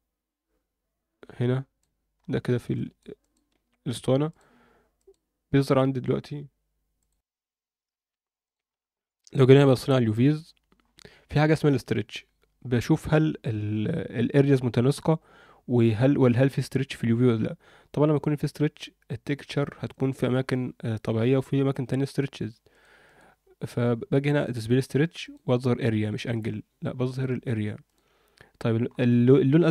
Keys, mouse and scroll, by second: 2.1-2.6 scroll up 3, 2.7 alt+shift+middle click, 3.2 shift+middle click, 4.3 click, 5.0-5.7 drag, 8.4 click, 9.0 a, 9.7 scroll up 1, 10.8-11.5 scroll up 1, 11.5-12.1 scroll down 2, 16.2-16.5 scroll up 2, 22.7-28.3 drag, 28.3-28.8 scroll down 2, 28.8-29.7 scroll up 2.